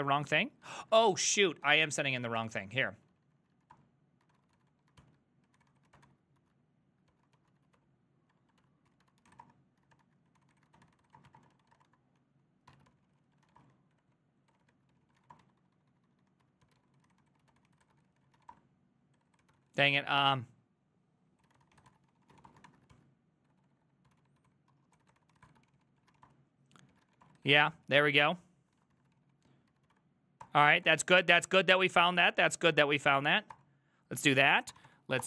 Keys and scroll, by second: 0.0-20.1 typing, 0.1 Up, 0.7 ctrl+a, 1.0 ctrl+c, 1.2 ctrl+c, 3.8 Return, 21.2-27.6 typing, 23.0 ctrl+c, 27.8 ctrl+c, 28.8 ctrl+a, 29.0 ctrl+a, 29.2 ctrl+c, 29.5-35.2 typing, 30.5 Return, 30.9 Up, 31.0 Up.